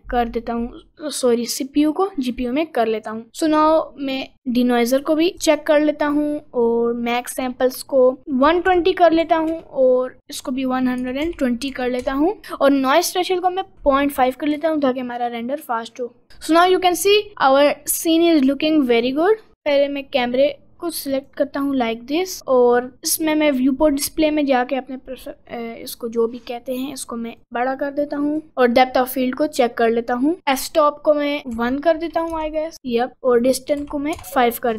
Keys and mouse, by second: 4.6 click, 7.3-8.8 drag, 9.5-11.4 drag, 12.8-13.8 drag, 14.4 right click, 18.8 g, 20.5 click, 22.7 click, 27.5 click, 28.7 click, 30.7 click, 32.7 click, 33.9 click.